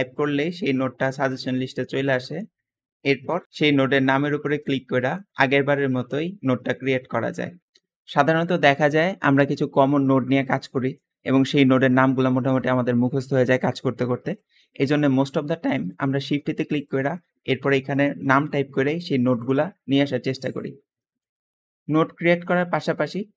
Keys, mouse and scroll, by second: 0.0-0.3 typing, 15.6 shift+a, 17.4-18.3 typing, 20.8 middle click, 21.7 middle click, 22.7 middle click.